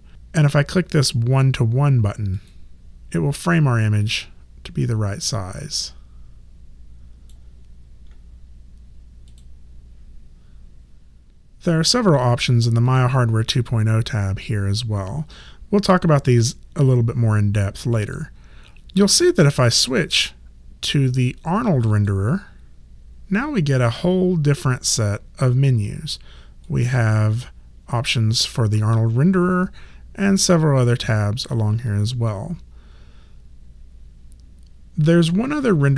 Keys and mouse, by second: 2.3 click, 5.2 click, 9.3 click, 12.9 click, 19.8 click, 21.9 click, 26.6 click.